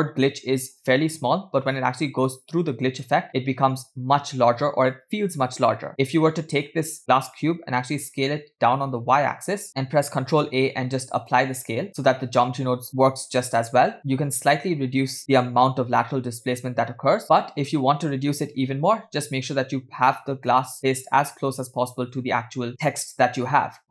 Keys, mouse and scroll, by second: 2.2-3.2 drag, 6.6 click, 7.9 s, 9.7 middle click, 9.7 scroll down 3, 10.3 ctrl+a, 11.9-12.9 middle drag, 12.9 KP_0, 14.0 middle click, 14.0 KP_0, 14.0 space, 15.9 space, 16.5 space, 17.2 space, 18.7 g.